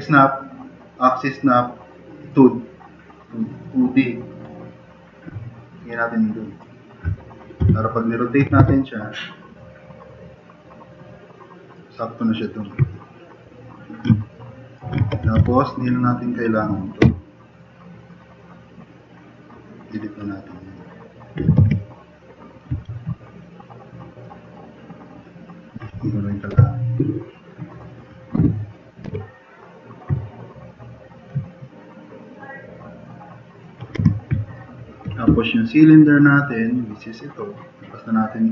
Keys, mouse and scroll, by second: 7.6 r, 8.6 s, 15.3 e, 15.5 e, 17.0 f, 17.5 click, 21.5 e, 21.6 e, 22.7 e, 26.5 BackSpace, 29.1 w, 34.0 4.